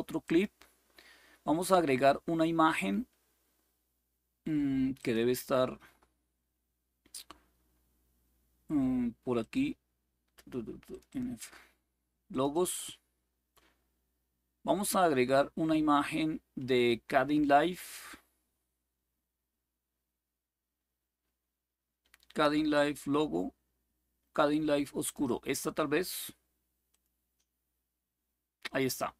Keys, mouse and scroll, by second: 0.0 click, 4.7 click, 9.1 click, 10.6 click, 12.0 click, 24.7 click, 26.6 click.